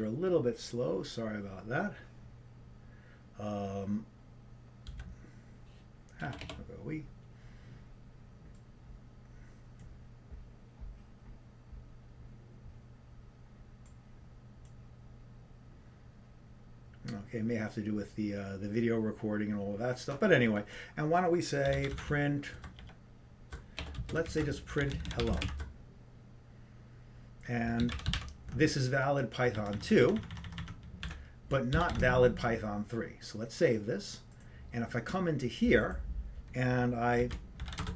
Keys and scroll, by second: 21.6-23.0 typing, 32.2-32.9 typing.